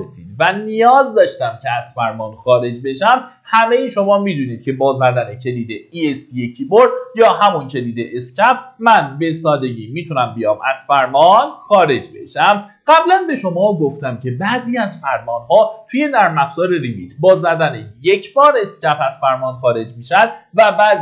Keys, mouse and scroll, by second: 5.7 Escape, 7.7 click, 12.1 middle click, 20.1 click.